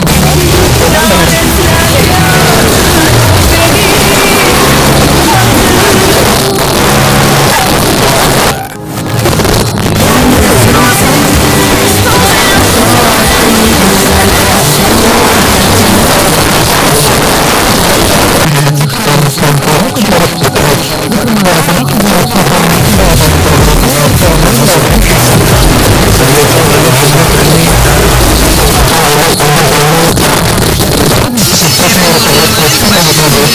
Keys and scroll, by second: 6.2 Page_Down, 16.1 Page_Down, 28.9 Page_Down.